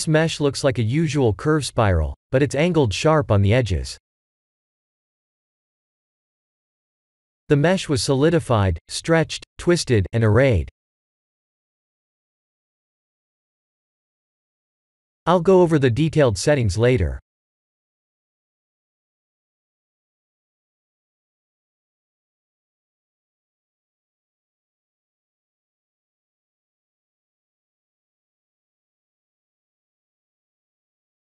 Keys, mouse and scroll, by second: 7.3 click, 9.4 click, 15.2-17.9 scroll down 4, 17.9 click, 18.5-20.9 scroll down 7, 22.3 click, 23.6 click, 26.3 click, 27.0 scroll up 4, 27.1 middle click, 27.4-29.3 scroll down 7, 29.3-30.1 scroll down 2, 30.7 click, 31.0-31.3 scroll down 5.